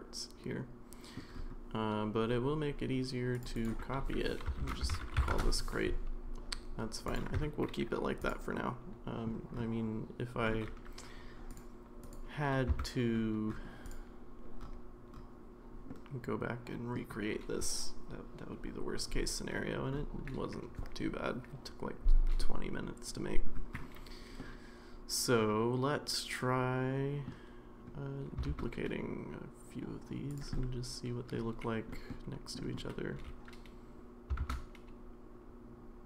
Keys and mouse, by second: 3.4 click, 3.5-5.9 drag, 7.0 click, 7.4 Tab, 8.5 middle click, 12.1 click, 12.7 Tab, 15.9-17.0 middle drag, 24.4-27.3 middle drag, 28.5 shift+d, 30.6 middle click, 31.9 middle drag, 32.6 middle drag, 33.1 g.